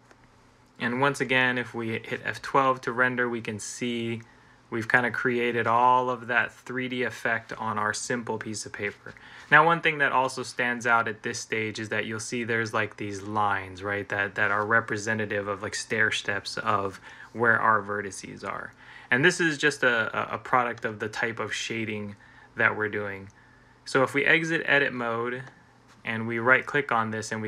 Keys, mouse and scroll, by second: 1.1 F12, 20.5 Escape, 24.6 Escape, 24.8 Tab.